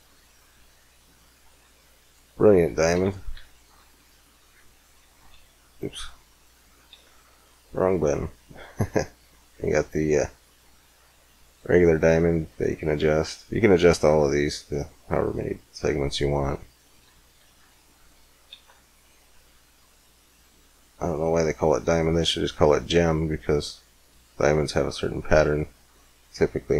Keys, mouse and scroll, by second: 0.1 z, 0.8-1.9 drag, 3.2 right click, 3.2 x, 3.8 shift+z, 5.2 shift+z, 6.7 shift+a, 13.0-14.3 middle drag, 13.0-13.7 scroll up 1, 14.3-16.3 drag, 17.5 x, 18.3 shift+a.